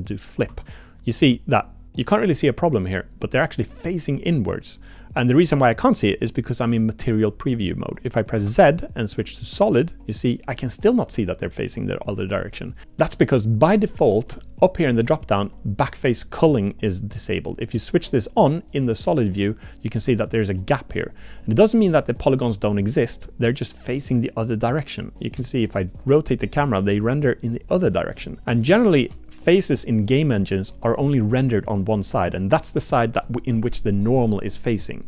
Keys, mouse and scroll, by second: 0.5 Tab, 0.7 click, 8.4 z, 14.7-18.2 drag, 20.1 middle click, 21.8 middle click, 24.0-25.3 middle drag, 25.4 shift+drag, 25.6 shift+middle click, 26.1 middle click, 26.4-27.3 middle drag, 27.3 click, 28.1 middle click, 28.8 shift+middle drag.